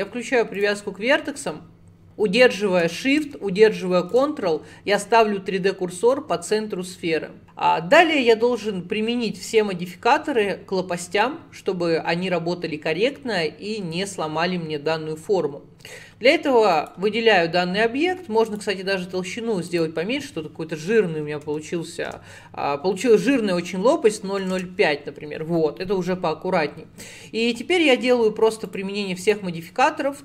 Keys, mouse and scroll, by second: 2.9-7.4 shift+right drag, 7.4 ctrl+z, 16.8 click, 17.9-18.5 scroll down 1, 18.5-21.7 drag, 28.7 click, 29.2 click.